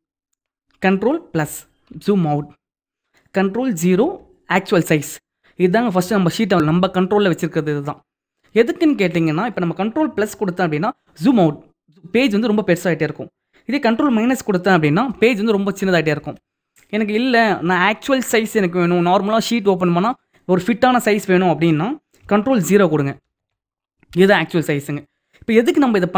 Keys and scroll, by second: 1.1 ctrl+=, 3.6 ctrl+0, 10.2 ctrl+=, 14.7 ctrl+-, 22.6 ctrl+0.